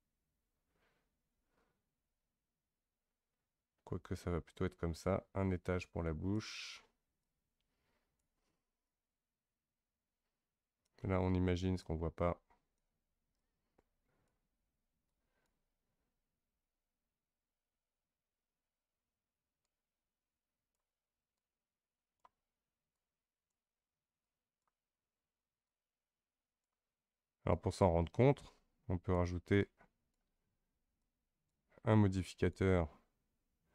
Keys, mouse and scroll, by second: 7.2-17.5 drag, 17.5-18.4 scroll up 2, 18.4-19.6 scroll up 1, 19.6-32.4 drag.